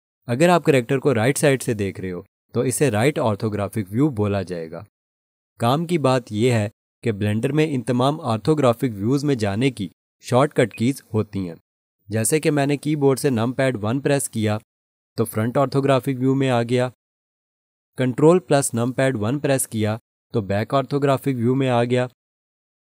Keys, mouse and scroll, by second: 2.1 3, 10.7 alt+click, 14.6 1, 19.5 ctrl+1.